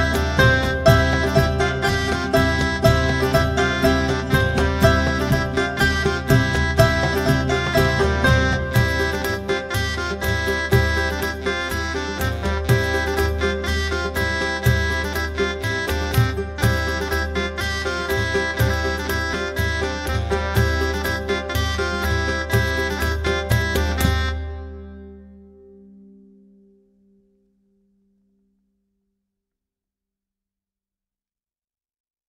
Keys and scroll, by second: 1.1-7.0 typing, 7.1 Return, 9.1 Return, 26.1-28.0 typing.